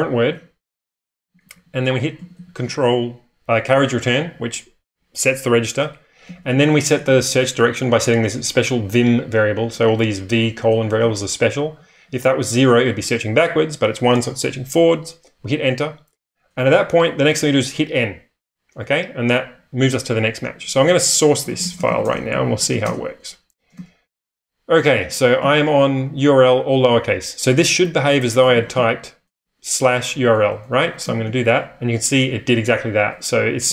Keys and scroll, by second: 0.3-2.3 typing, 6.0-8.0 typing, 9.5-11.9 typing, 16.9-17.2 typing, 21.2-25.4 typing, 28.1-29.2 typing, 30.2 Return, 31.1 *, 33.6-33.7 typing.